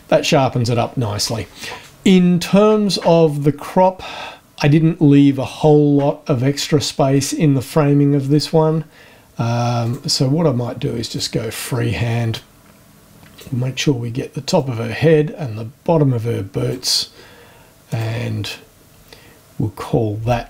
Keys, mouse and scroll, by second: 7.1 click, 8.3 click, 9.8 click, 11.1 click, 12.3-13.6 drag, 14.5-16.9 drag, 17.9 click.